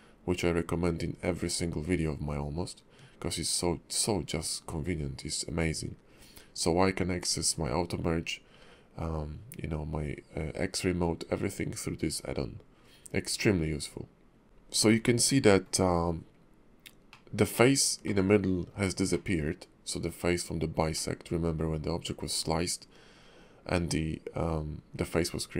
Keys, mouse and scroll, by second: 14.4 shift+middle click, 14.4-14.9 scroll down 1, 14.9 middle click, 17.1 middle click, 18.0 middle click, 19.1 middle click, 20.9 middle click.